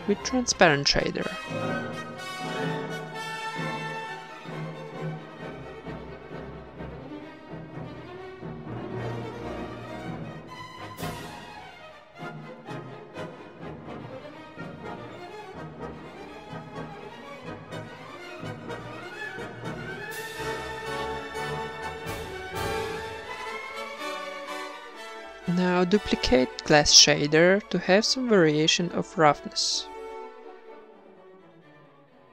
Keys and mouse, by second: 0.5 middle click, 3.8 ctrl+v, 4.6-5.6 drag, 5.2 g, 5.6 shift+a, 8.1 click, 9.2 middle click, 9.9-11.8 drag, 12.5 click, 18.4 middle click, 18.6 a, 18.8 b, 19.2 g, 20.0-21.0 drag, 20.2 g, 22.8-23.8 drag, 26.8-27.9 middle drag, 28.1-29.7 drag, 28.2 shift+d, 29.4 ctrl+s, 30.7 shift+b.